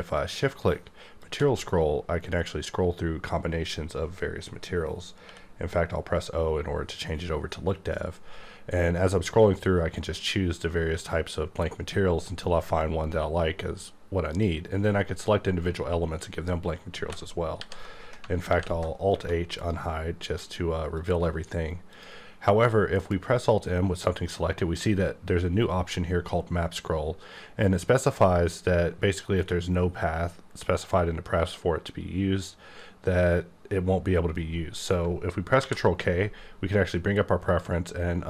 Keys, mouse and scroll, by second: 1.2 shift+click, 1.9-3.5 scroll up 3, 3.5-5.0 scroll up 4, 5.0 scroll up 2, 5.2 o, 8.1-8.8 scroll up 4, 9.3-10.9 scroll up 6, 12.1-12.9 scroll up 3, 12.9-13.5 scroll up 1, 13.5-14.3 scroll up 2, 14.3 click, 17.0 alt+x, 17.5 alt+h, 18.2 alt+h, 18.4 alt+h, 18.5 alt+j, 19.1 1, 19.6 click, 20.9 click, 21.9 click, 23.0 alt+m, 35.6 ctrl+k, 37.5 click.